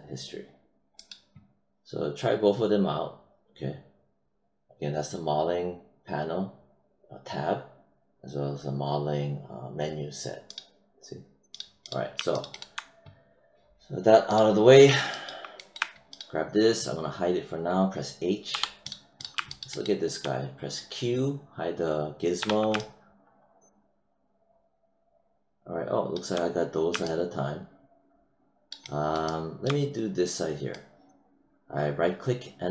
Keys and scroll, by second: 18.5 h, 22.3 q.